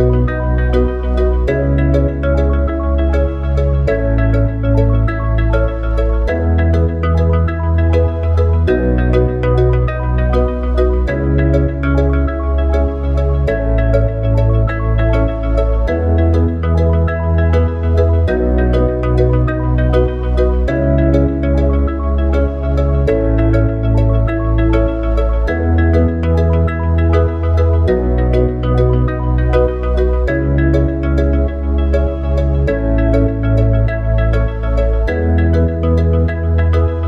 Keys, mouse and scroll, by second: 2.2 click, 3.3 s, 5.1 click, 6.3 click, 7.7 s, 14.5 click, 16.4 click, 18.1 click, 18.7 click, 19.8 click, 22.2-23.5 drag, 23.5 r, 27.6 click, 28.4 click, 31.5 s, 32.9 click.